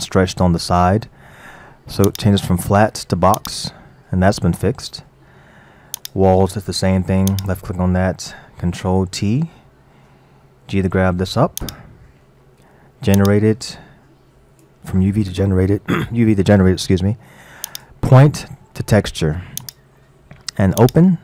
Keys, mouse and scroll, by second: 2.1-5.1 drag, 6.0 click, 7.3 click, 9.1 ctrl+t, 10.7 g, 13.2 click, 17.7-20.7 drag, 20.8 click.